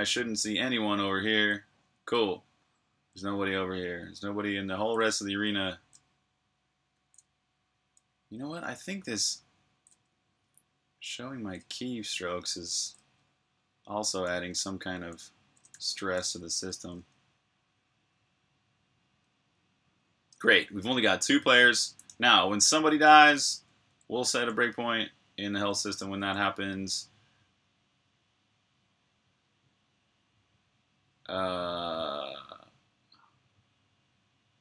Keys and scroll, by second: 1.7-3.4 typing, 4.5-7.4 typing, 8.8-10.1 typing, 14.7-16.8 typing, 16.8 super+q, 24.2 super+j, 25.8-26.7 typing.